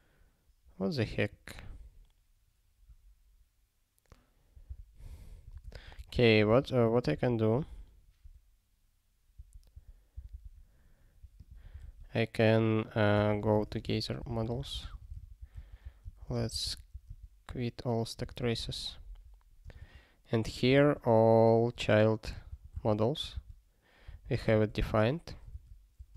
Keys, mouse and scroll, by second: 1.3 click, 1.4 click, 4.7 super+b, 5.5 ctrl+g, 10.3 super+b, 11.3 click, 11.5 click, 18.2 super+o.